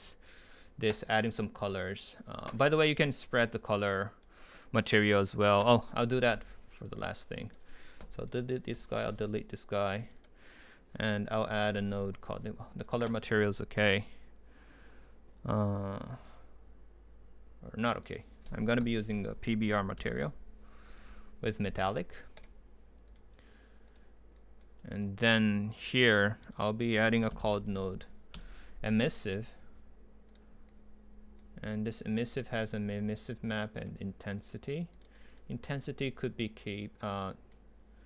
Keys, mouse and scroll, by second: 0.0-1.4 right drag, 1.4-3.6 drag, 3.9-6.0 drag, 6.9 right click, 8.0 Delete, 8.7 Delete, 10.1-11.8 drag, 14.9 click, 18.8 Delete, 19.1-21.0 drag, 21.0 Down, 22.4-24.8 drag, 24.8-26.6 right drag, 26.6-28.3 drag, 28.3 Return.